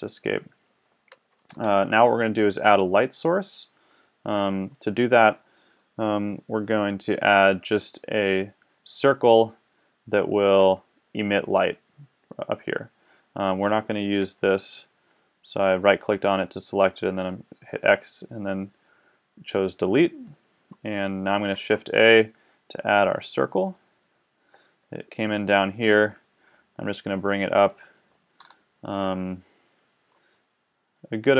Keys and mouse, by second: 1.5 KP_1, 14.2 x, 21.3 shift+a, 25.9-26.8 middle drag, 26.8-27.7 drag, 28.4-31.0 middle drag.